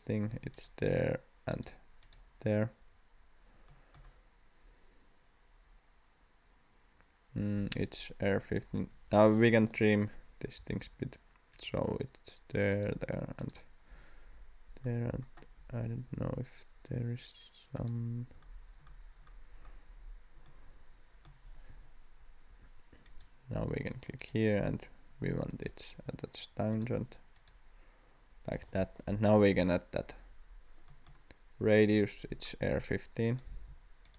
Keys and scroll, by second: 8.4 Escape, 10.6 t, 22.5 Escape, 28.5 Escape, 33.5 d.